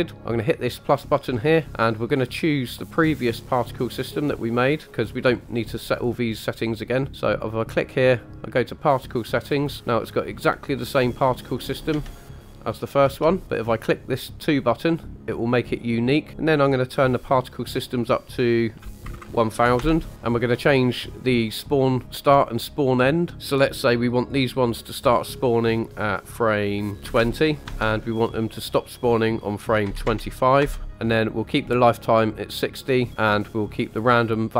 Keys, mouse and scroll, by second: 0.0 click, 1.4 click, 7.1 click, 12.0 space, 13.0 space, 14.4 click, 16.2-19.8 drag, 19.1 KP_0, 20.1 shift+middle click, 20.1-20.5 scroll down 2, 23.3 click.